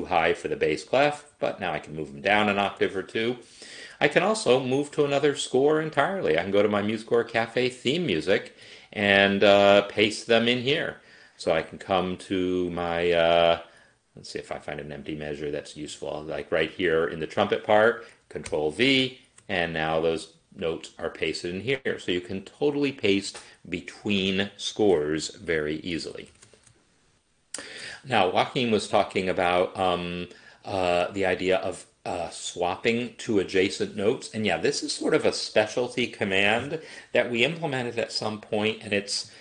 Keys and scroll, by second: 1.4 ctrl+Down, 2.2 ctrl+Down, 18.5 ctrl+v, 25.2 ctrl+z, 25.9 ctrl+z, 26.1 ctrl+z, 26.2 ctrl+z, 33.7 n, 34.8 Right.